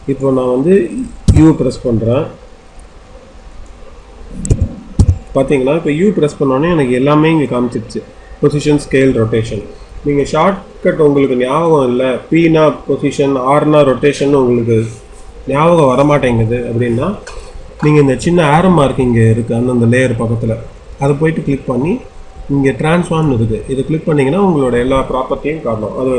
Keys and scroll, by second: 1.2 u, 4.5 u.